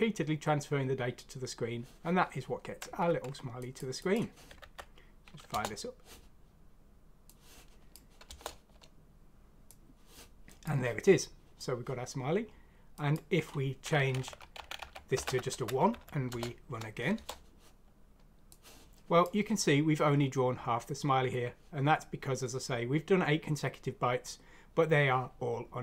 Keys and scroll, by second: 4.6 F6, 5.5 Return, 8.2 Return, 14.5 Right, 14.6 Right, 14.7 Right, 15.2 1, 15.9 F6, 16.2 Return, 17.2 Return.